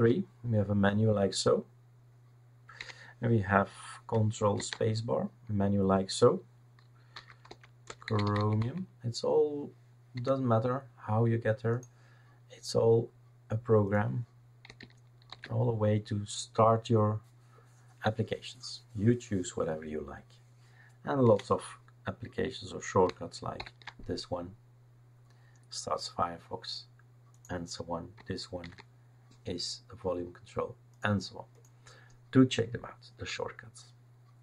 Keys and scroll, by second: 2.8 Escape, 4.6 ctrl+space, 7.1-9.1 typing, 10.1 Escape, 15.3 shift+super+d, 21.2 Escape, 23.6 ctrl+alt+f, 28.6 super+v.